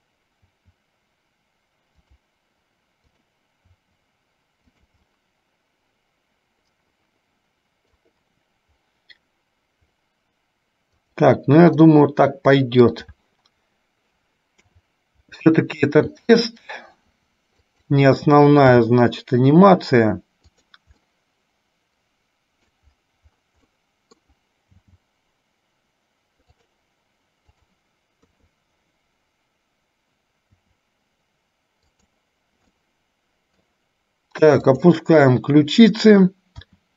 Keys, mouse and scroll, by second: 0.7 r, 3.2 click, 3.9 r, 5.3-8.0 middle drag, 12.0-13.2 middle drag, 14.7 KP_7, 21.2-22.9 middle drag, 23.9 middle click, 24.8 g, 27.7 click, 28.4 KP_3, 30.7 r, 32.9-33.9 middle drag, 34.8 click, 36.7 r.